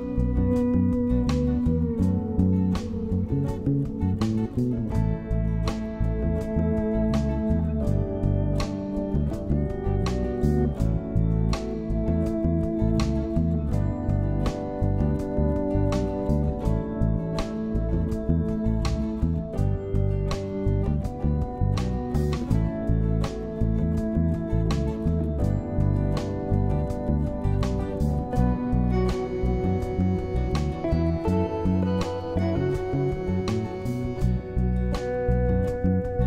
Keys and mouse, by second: 1.6-2.0 drag, 2.4-3.0 drag, 4.3 middle click, 5.1 shift+middle click, 6.6 shift+middle click, 7.1 middle click, 10.2 click, 10.7 Tab, 11.2 click, 12.4 shift+click, 13.5 shift+click, 14.2 shift+click, 15.2 shift+click, 16.1 shift+click, 16.4 shift+click, 16.8 shift+click, 21.0-21.9 shift+drag, 23.1 shift+click, 23.4 shift+click, 26.1-26.9 drag, 28.3-29.5 drag, 29.8 click, 30.0 click, 30.4 click, 30.8 click, 32.2 click, 32.8 click, 33.9 click, 34.5 click.